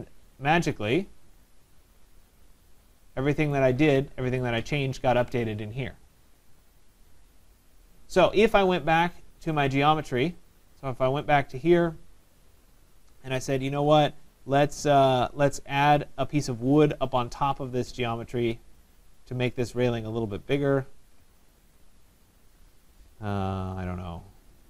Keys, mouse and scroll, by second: 1.5 click, 2.0 middle click, 2.1 middle click, 2.2 middle click, 2.7 scroll, 3.5 right click, 3.9-4.2 scroll, 6.6 middle click, 7.9 right click, 9.7 click, 11.6 right click, 14.7 click, 14.7 right click, 17.1 click, 19.1 click, 21.9 click.